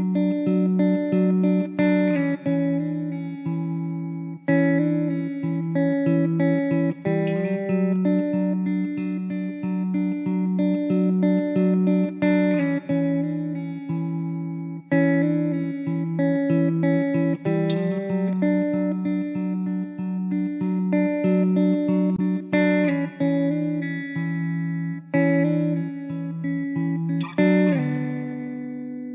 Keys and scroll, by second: 0.9 3, 3.7 r, 4.5 s, 5.4 e, 6.0 s, 7.5 `, 10.9 3, 13.0 ctrl+z, 14.1 s, 15.0 e, 15.5 s, 17.0 `, 18.5 ctrl+z, 18.6 ctrl+z, 22.5 ctrl+r, 23.4 ctrl+r, 26.5 3.